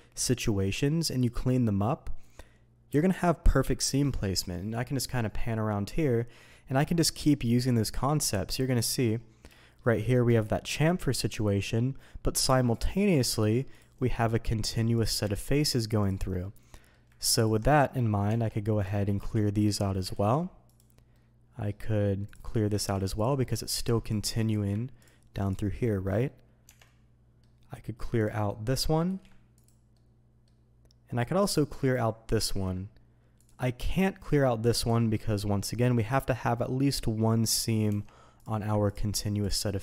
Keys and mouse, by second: 5.0-6.7 middle drag, 7.4 click, 8.7 middle drag, 9.5 shift+middle drag, 10.2 Tab, 10.7 click, 12.7 click, 13.7 ctrl+click, 15.3 ctrl+click, 16.4 middle click, 17.6 middle click, 18.2 Tab, 18.8 click, 19.5 shift+click, 20.1 ctrl+e, 21.1-21.7 drag, 22.2 click, 23.0 ctrl+e, 23.4 middle click, 23.7 Tab, 24.0 click, 24.2 middle drag, 26.0 click, 26.6 Tab, 26.8-27.4 middle drag, 28.1 click, 28.4 middle drag, 29.0 ctrl+e, 29.9-30.4 middle drag, 31.2 click, 31.8 click, 32.4 ctrl+e, 34.7 click, 37.8 Tab, 38.9-39.8 ctrl+drag.